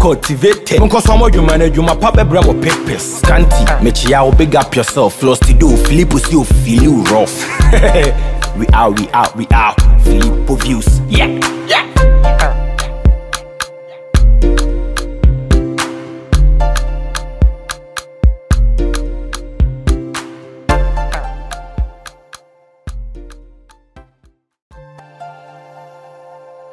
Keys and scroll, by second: 5.4 ctrl+a.